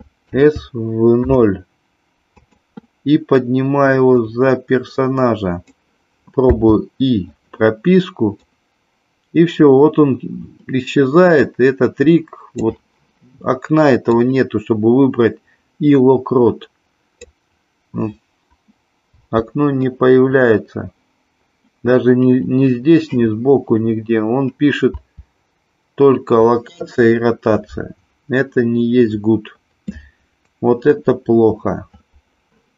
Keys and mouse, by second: 0.3 s, 1.3 KP_0, 2.4 click, 4.0-5.8 drag, 6.5 i, 8.4-12.6 drag, 14.1-17.2 drag, 19.1 i, 24.9 i.